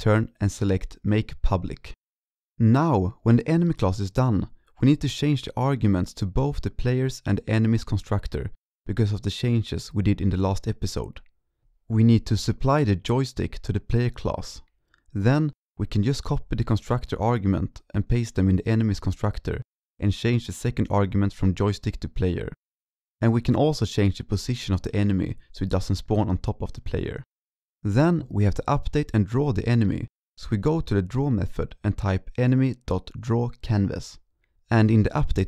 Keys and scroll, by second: 15.3 ctrl+Right, 16.7 ctrl+Left, 18.4-18.9 ctrl+shift+Right, 19.2 ctrl+c, 19.6 ctrl+v, 20.2-20.6 ctrl+Left, 20.8 ctrl+Right, 23.1 ctrl+s, 24.3 ctrl+Right, 24.3 ctrl+Right, 24.4 ctrl+Right, 25.5 ctrl+s, 33.5 ctrl+Right, 33.8 ctrl+s.